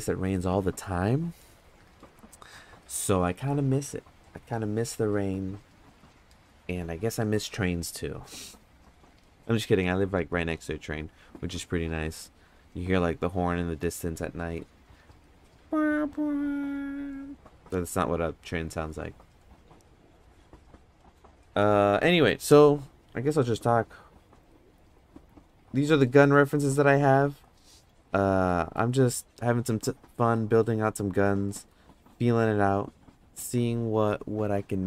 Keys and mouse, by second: 24.4 middle click, 24.9 middle click, 26.0 middle click, 27.4 middle click, 28.5 middle click, 30.3 middle click, 31.4 middle click.